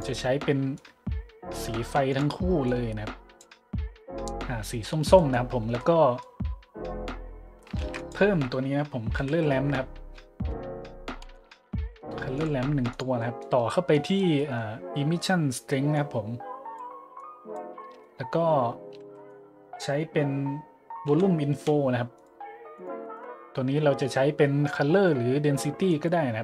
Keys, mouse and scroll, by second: 0.8 click, 2.1 click, 2.7 click, 5.2 middle click, 5.8 middle click, 7.8 shift+a, 8.0 click, 8.9-9.8 typing, 11.3 m, 12.3 click, 12.9 click, 13.9 click, 15.9-16.8 drag, 17.1 click, 17.8 click, 19.0 shift+a, 19.2 click, 21.1 v, 21.5 d, 22.1 click, 22.8 click, 25.9-26.4 drag.